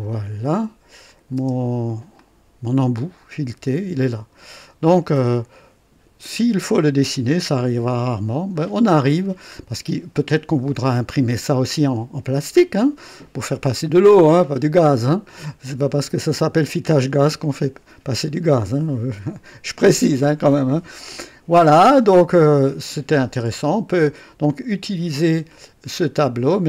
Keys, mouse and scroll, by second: 0.2 typing, 1.0 click, 1.4 typing, 2.1-7.1 drag, 7.6 KP_1, 8.5 scroll up 1, 9.2 scroll down 1, 10.1-13.9 drag, 17.4-20.7 drag, 21.0 KP_1, 21.8-24.2 drag, 26.2 click.